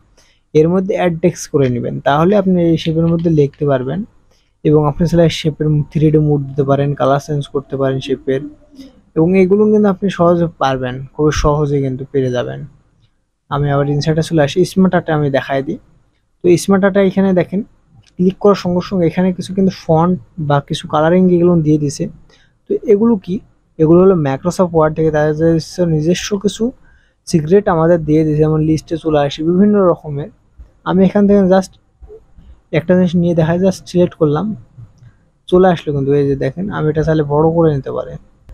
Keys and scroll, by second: 2.9 KP_5, 3.4 KP_9, 3.8 KP_9.